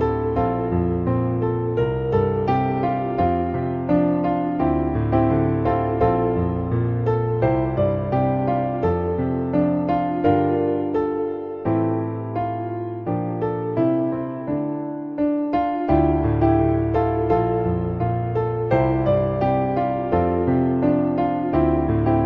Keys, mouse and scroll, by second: 0.0 e, 1.4 e, 2.1 e, 3.2 middle click, 3.4 e, 3.9 e, 5.8 shift+middle click, 7.1 shift+middle click, 8.9 click, 9.1 g, 9.8 g, 11.0 click, 11.4 e, 12.0 e, 13.2 shift+middle click, 13.5 e, 14.5 f, 14.9 shift+middle click, 15.2 Tab, 17.6 click, 18.4 click, 19.6 shift+middle click, 21.9 middle click.